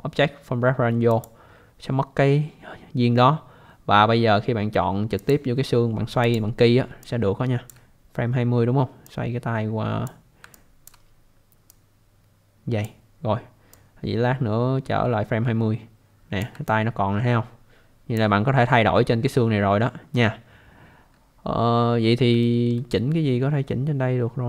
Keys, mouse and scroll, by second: 1.1 click, 5.2 click, 6.2 click, 7.0 alt+click, 9.0 click, 10.5 alt+click, 11.7 click, 13.7 click, 16.7 alt+click, 18.9 scroll up 1, 19.9 scroll down 1, 22.4 alt+middle click.